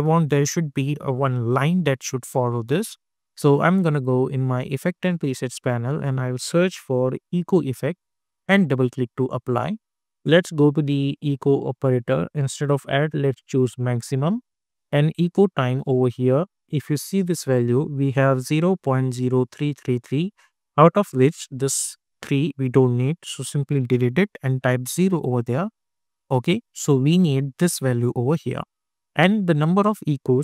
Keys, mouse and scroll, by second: 4.7 click, 5.8 ctrl+a, 6.4-7.7 typing, 8.4 click, 13.2 click, 21.1 click, 26.5 click, 28.7 click.